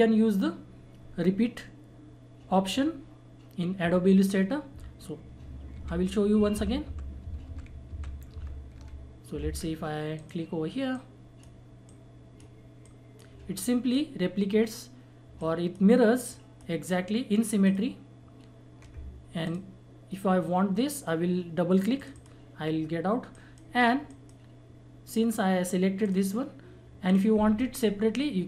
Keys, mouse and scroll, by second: 5.7 ctrl+z, 9.5 ctrl+z, 10.1-16.3 drag, 21.9 click.